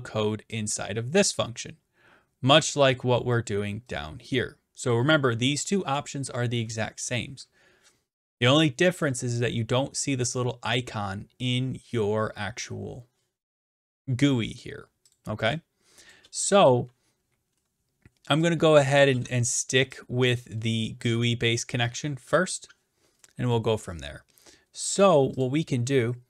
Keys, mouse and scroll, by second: 1.2 click, 3.2-3.9 scroll down 1, 3.9-4.4 scroll down 1, 4.9 click, 15.2 click, 16.1 click, 16.2 BackSpace, 17.6-18.2 scroll, 19.0 click, 19.1 BackSpace, 20.3 click, 20.6-21.1 scroll down 2, 21.1 scroll down 1, 25.4 click.